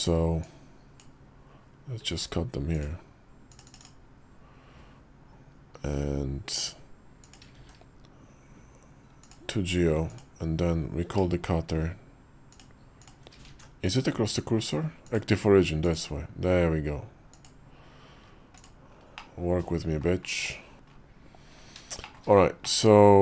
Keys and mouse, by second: 0.3 click, 7.4 shift+s, 10.9 q, 13.3 alt+x, 14.9-15.9 drag, 17.2 click, 18.4 click, 19.0 middle click, 21.9 shift+middle click, 22.5-23.2 middle drag.